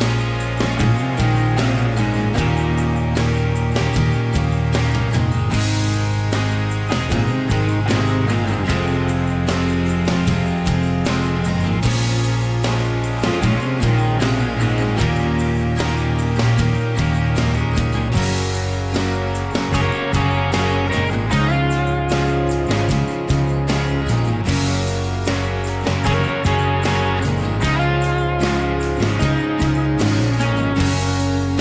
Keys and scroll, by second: 1.3 Escape, 2.1 Escape, 2.5 ctrl+a, 3.0 ctrl+h, 8.7-9.1 typing, 12.7 m, 14.7-15.6 typing, 16.7 typing, 19.4 m, 21.8-25.7 typing, 23.5 ctrl+z, 25.3 Return, 27.6 p, 28.5 Escape, 29.4 r.